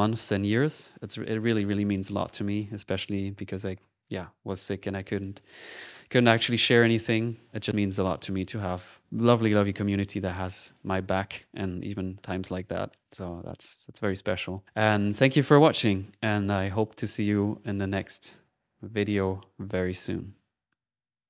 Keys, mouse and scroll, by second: 17.8 middle click, 18.5 typing, 20.2 click.